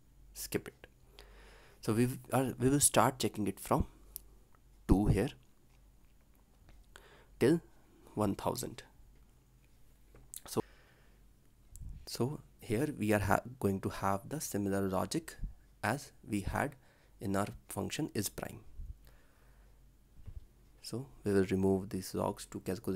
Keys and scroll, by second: 0.9 ctrl+alt+l, 10.3 ctrl+s, 19.1 ctrl+c, 20.2 ctrl+v.